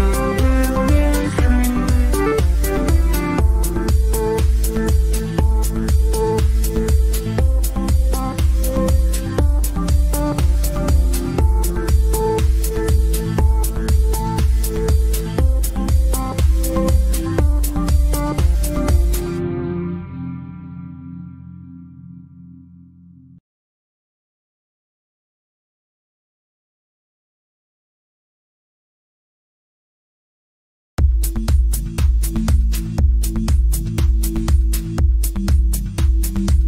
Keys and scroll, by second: 24.5 F3, 24.9 Escape, 27.0 F3, 29.4 ctrl+z.